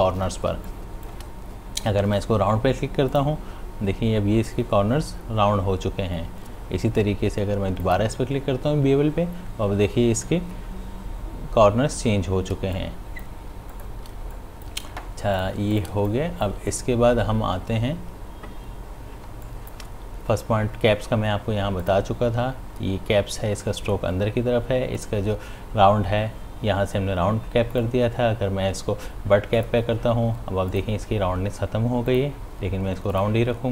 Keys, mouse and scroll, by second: 0.5 space, 0.7 click, 1.0 space, 3.1 click, 7.8 click, 12.6 space, 12.8 click, 13.1 space, 13.9 ctrl+alt+click, 14.2 ctrl+space, 14.4 click, 14.8 space, 15.5 click, 15.5 space, 15.8 ctrl+alt+click, 16.0 ctrl+space, 16.1 click, 19.2 space, 19.5 click, 19.8 space, 21.8 click, 25.0 click, 27.7 click, 27.8 click.